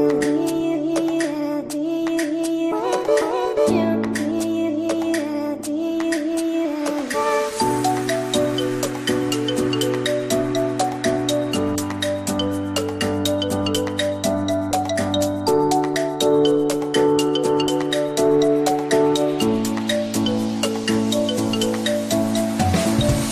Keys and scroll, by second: 15.8 space, 16.2 Escape.